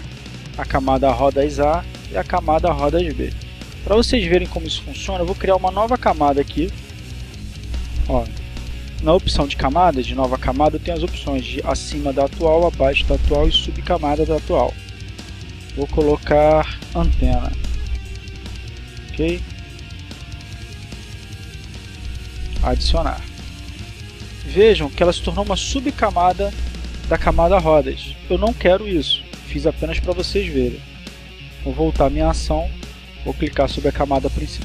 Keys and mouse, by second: 0.0 click, 1.7 click, 5.2 click, 6.4 click, 7.4 click, 13.1 click, 14.1 click, 15.2-16.2 drag, 16.6-18.0 typing, 19.6 click, 20.9 shift+a, 21.9 click, 30.7 ctrl+z, 32.1 click.